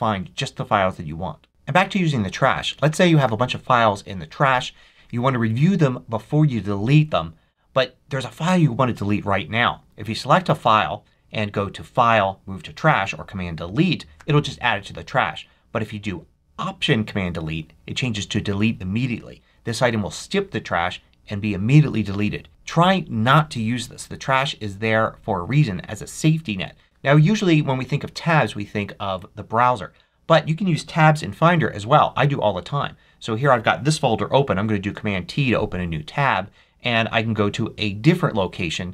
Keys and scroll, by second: 34.7 super+t.